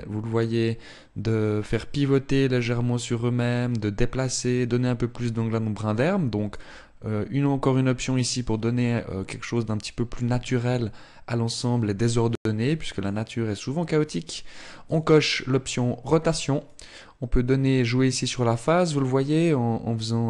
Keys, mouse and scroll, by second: 6.2 click, 10.3 click, 14.5 click, 16.3 click.